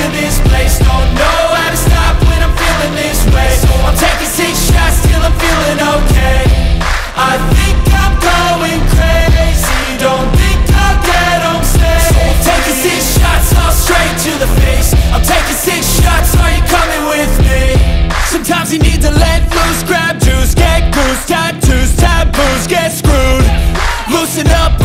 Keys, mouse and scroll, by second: 0.1-1.3 middle drag, 1.3-1.8 scroll up 3, 1.8-2.3 scroll down 1, 2.3-2.6 scroll down 1, 2.6 KP_1, 2.9 scroll down 1, 3.1 shift+middle click, 4.1 click, 4.8 scroll up 1, 5.0 shift+middle click, 5.5 shift+a, 7.3-10.6 drag, 10.6 r, 12.1-14.5 shift+middle drag, 14.5-14.9 scroll down 3, 14.9 KP_3, 15.5 s, 16.7 s, 18.4-18.8 scroll down 1, 18.8 KP_1, 19.1-19.9 scroll up 6, 19.9 shift+middle click, 20.7-21.8 drag, 21.8 ctrl+a, 22.2 Tab, 22.7-23.8 drag, 23.8 i.